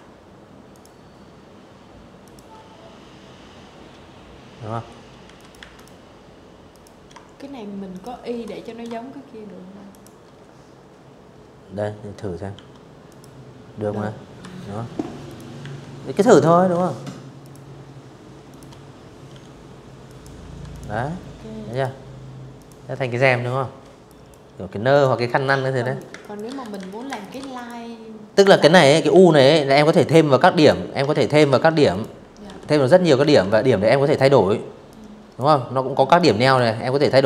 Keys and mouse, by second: 2.9 z, 3.0 click, 3.2 a, 3.4 click, 4.4 click, 5.6 shift+click, 7.5 shift+click, 10.2 i, 10.7 click, 12.0 v, 12.9 click, 13.3 a, 14.0 click, 15.1 shift+click, 16.2 shift+click, 17.0 i, 17.7 click, 18.0 v, 18.4 click, 19.3 click, 20.2 click, 21.7 click, 22.6 click, 22.8-25.0 typing, 22.9 click, 23.5 click, 23.9 click, 24.3 click, 24.5 click, 24.9 click, 25.2 click, 26.8 u, 27.6 click, 28.2 click, 28.8 ctrl+z, 29.2 ctrl+z, 29.6 click, 30.1 v, 30.8 a, 31.1 click, 32.5 click, 33.8 click, 35.1 click, 36.3 z, 36.5 click, 36.7 v.